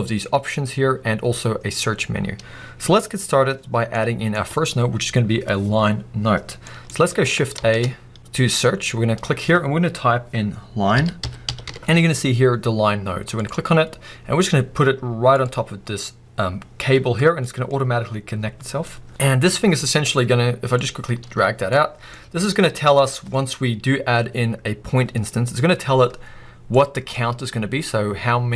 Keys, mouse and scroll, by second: 15.4 click, 21.8 click.